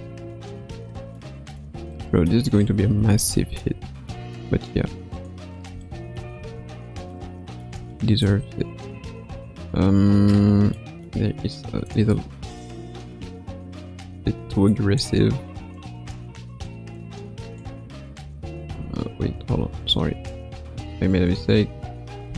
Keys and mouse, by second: 0.2 KP_3, 1.1-1.6 middle drag, 1.9 middle click, 3.1-3.6 shift+middle drag, 4.1-5.1 middle drag, 5.1 click, 5.8-6.2 shift+middle drag, 6.3 space, 7.1 middle click, 7.9 shift+middle click, 9.2 space, 10.7 middle click, 11.8-15.0 drag, 15.7 click, 16.9-19.3 drag, 19.3 a, 20.6 ctrl+z, 21.3 ctrl+z, 22.2 a.